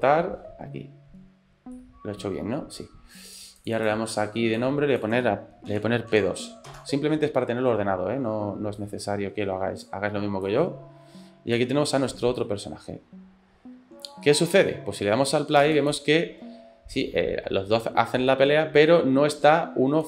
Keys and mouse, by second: 1.8-2.8 middle drag, 3.6 click, 3.9-7.2 drag, 8.9-9.9 drag, 10.5-11.7 drag, 12.4-14.2 drag, 14.3 middle click, 15.6 space.